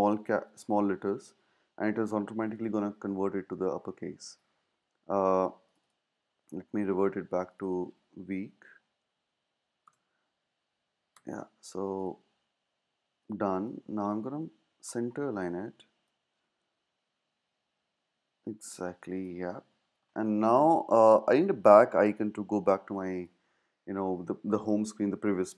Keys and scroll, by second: 0.0-1.0 typing, 8.4-9.6 typing, 9.8 Return, 11.1 BackSpace, 17.0 Down, 17.1 Down, 18.2 Up.